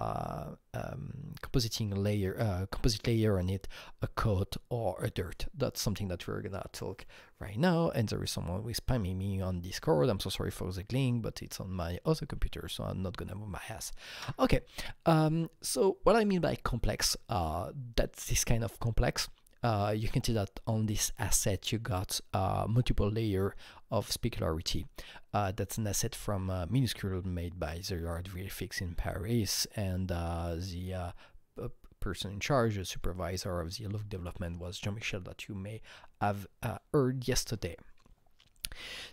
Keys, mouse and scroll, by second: 14.1 Right, 38.6 Right.